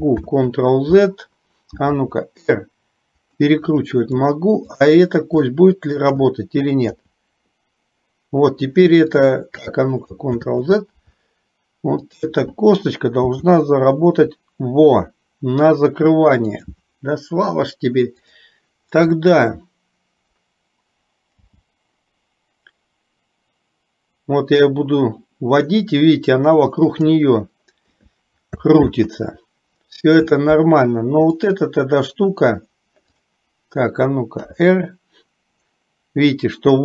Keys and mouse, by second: 0.2 ctrl+z, 2.1 r, 4.8 shift+click, 5.4 shift+middle click, 6.9 r, 10.4 ctrl+z, 13.4 r, 21.4 g, 28.9 ctrl+z, 31.4 click, 33.3 click, 34.6 r.